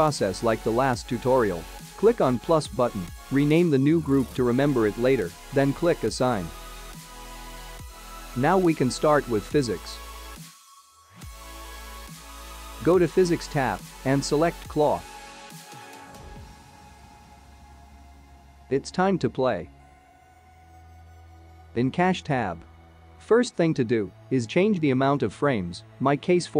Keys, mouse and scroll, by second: 1.3 click, 1.4 click, 7.5 click, 8.8 scroll down 3, 8.9 middle click, 9.7-10.2 scroll up 3, 10.2 shift+middle click, 11.9-12.9 scroll down 4, 12.9 scroll up 3, 13.5 shift+middle click, 14.3 click, 15.6 click, 18.4 click, 20.5-22.4 scroll down 10, 22.4-22.7 scroll up 2, 22.7-24.6 scroll down 2, 24.8 scroll down 3.